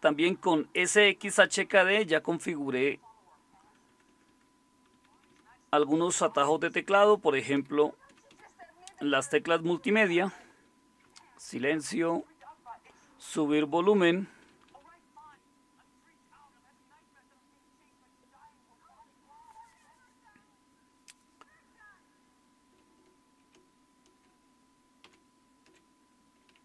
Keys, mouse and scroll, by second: 25.0 super+6.